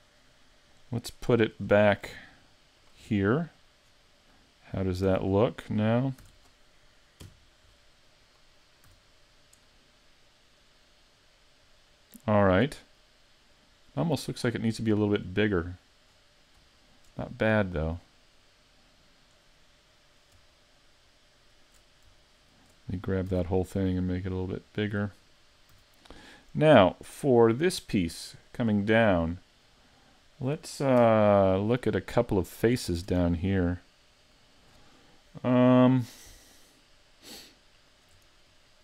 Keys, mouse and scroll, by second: 2.8 shift+click, 3.3-3.9 scroll down 3, 3.9 scroll down 5, 4.3 middle click, 5.1 a, 5.3-6.0 scroll down 2, 6.2 shift+c, 7.3 KP_5, 8.3 right click, 8.9 a, 9.7 middle click, 15.2-16.1 scroll down 4, 16.1-16.7 scroll up 1, 16.7 shift+middle click, 16.7-17.8 scroll up 4, 17.8 right click, 19.5 middle click, 21.4 shift+right click, 22.2 shift+middle click, 23.3 s, 25.4 middle click, 25.7 a, 26.0-26.5 scroll up 3, 26.6 right click, 29.5 middle click, 31.0 KP_Decimal, 31.8-32.2 scroll down 5, 32.2 middle click, 33.1 Tab, 33.5 middle click, 37.9 right click, 38.5 shift+right click.